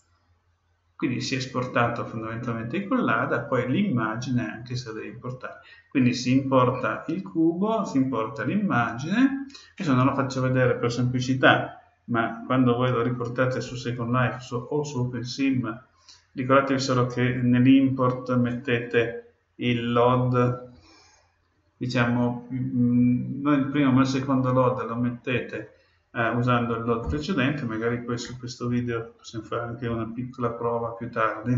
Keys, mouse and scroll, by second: 0.0-1.7 drag.